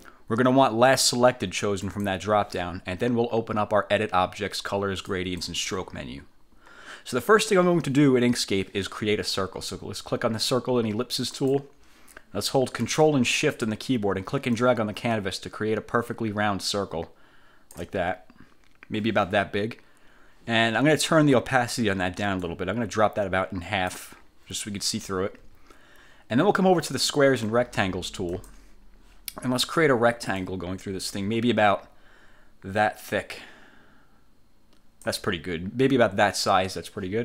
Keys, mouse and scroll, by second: 1.0 click, 1.9 click, 5.2 click, 11.5 click, 14.7-18.1 ctrl+shift+drag, 22.5-24.2 drag, 24.2-28.4 middle drag, 28.4 click, 30.5-35.4 drag.